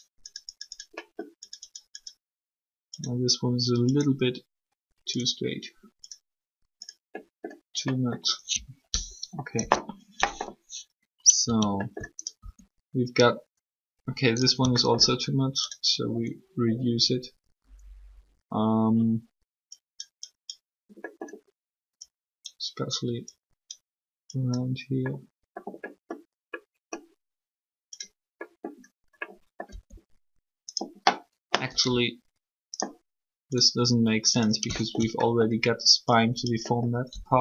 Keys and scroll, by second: 9.3 3, 12.4 alt+shift+r, 29.7 r, 31.6 r, 37.1 r.